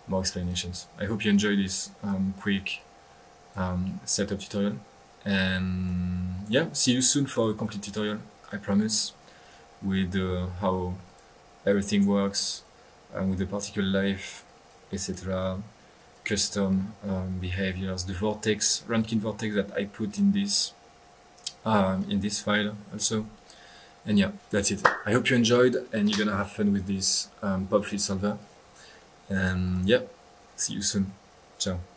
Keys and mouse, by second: 1.3 click, 2.3 middle click, 2.7 click, 5.8-6.1 drag, 6.3-6.6 drag, 8.4 click, 9.4 click, 10.7 Escape, 11.0 click, 12.4 click, 14.4 click, 15.8 middle click, 15.9 click, 23.4-24.1 drag, 28.4-28.7 drag, 28.9 middle click, 29.4 middle click, 29.6 drag, 30.0 click.